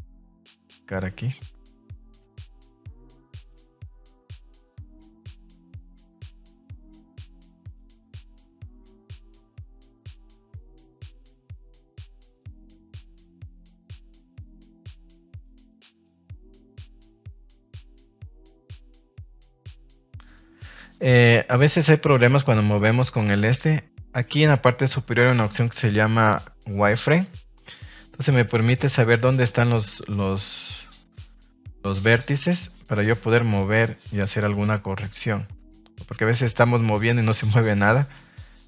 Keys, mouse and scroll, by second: 0.2 middle click, 1.3 click, 2.7 click, 3.8 click, 4.5 click, 6.3-7.3 middle drag, 7.7 middle click, 8.3 middle click, 8.9 middle click, 10.8 click, 12.3 middle click, 14.0 click, 14.7 middle click, 15.1 ctrl+z, 16.5 middle click, 17.0 middle click, 17.9 click, 18.8 middle click, 19.4 middle click, 19.9 middle click, 20.8 middle click, 21.1 shift+middle click, 21.7 middle click, 22.3 ctrl+s, 24.1-27.6 drag, 27.7 middle click, 28.7 click, 29.4 middle click, 30.1 click, 32.1 middle click, 32.7 middle click, 33.0 shift+middle click, 33.2 middle click, 34.0 click, 35.4 middle click, 36.0 middle click, 36.4 middle click.